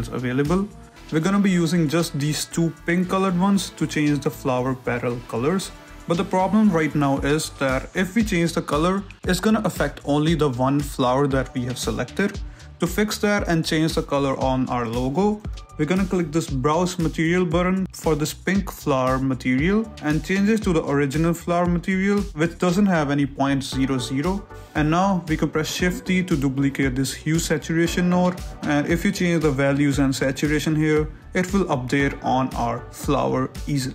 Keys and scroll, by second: 8.6 n, 27.0 shift+d, 32.1 Return.